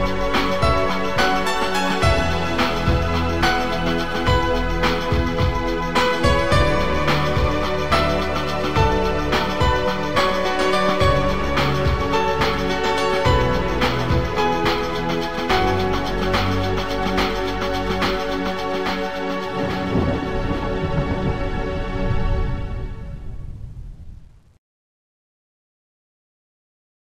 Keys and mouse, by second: 0.9 click, 6.9 click, 9.3 ctrl+click, 13.5 ctrl+click, 14.0 click, 16.1 click, 19.1 click, 20.8 click, 23.1 click, 25.5 click, 26.4 click.